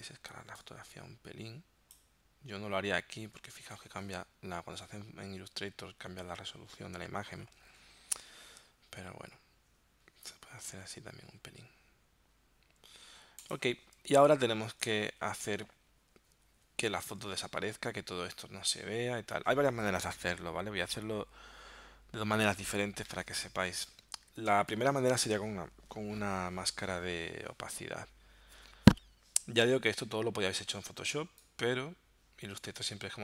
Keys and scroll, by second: 24.6 space, 31.2 space.